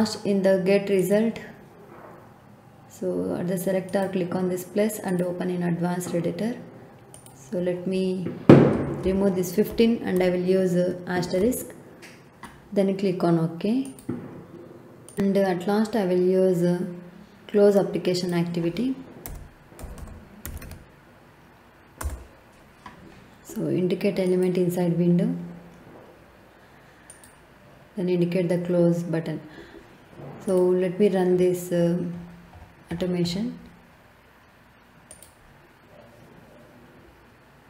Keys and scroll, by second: 8.7 BackSpace, 11.0 shift+8, 19.2-21.1 typing, 22.0 Return.